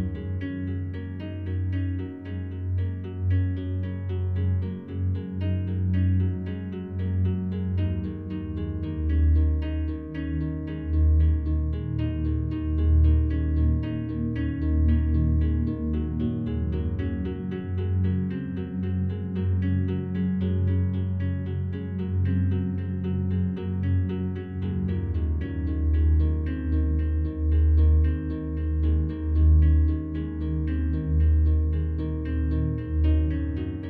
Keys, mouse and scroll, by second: 3.2 click, 4.6 click, 5.4 click, 6.3 click, 7.5 shift+click, 9.3 click, 10.4-11.7 drag, 13.2 click, 14.7 click, 15.8 click, 17.3 click, 18.2 Page_Down, 20.4 click, 21.5 click, 22.4-23.5 ctrl+shift+drag, 25.6 click, 26.6 click, 27.6 click, 28.5 click, 30.2 ctrl+shift+click, 31.8 ctrl+d, 32.5 shift+click.